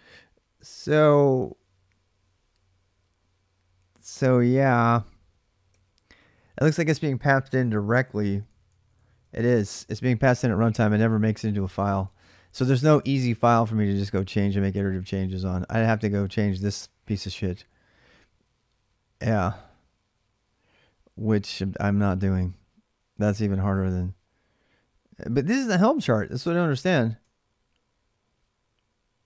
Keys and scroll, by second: 5.5-17.6 typing, 25.1 ctrl+[, 25.2-27.7 k.